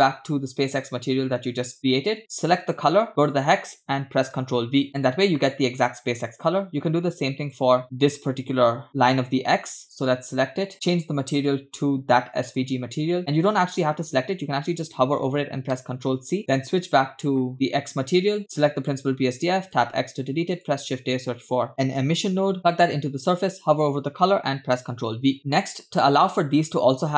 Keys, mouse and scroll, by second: 2.4 click, 5.4 shift+middle click, 7.5 click, 10.3 click, 10.9 click, 15.7 ctrl+c, 16.6 click, 18.4 click, 19.8 x, 20.2 shift+a, 22.8 click, 24.8 ctrl+v, 26.0 click, 26.5 click.